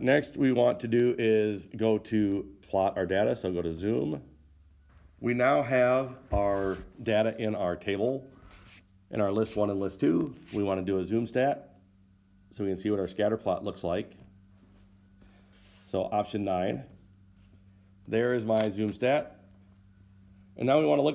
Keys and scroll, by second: 4.9 Return, 4.9 Down, 4.9 9, 17.1 9.